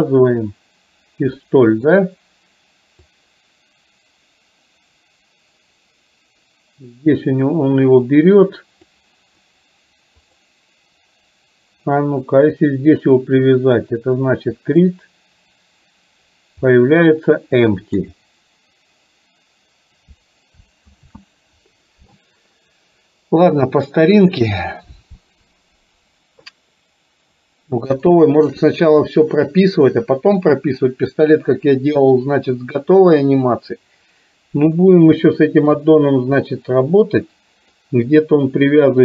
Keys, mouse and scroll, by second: 1.5 shift+middle click, 3.2-9.1 drag, 10.3 click, 14.7 click, 16.7-18.1 middle drag, 21.1 ctrl+z, 24.3 click, 28.1 shift+middle click, 35.3 shift+middle click, 36.6-37.8 middle drag.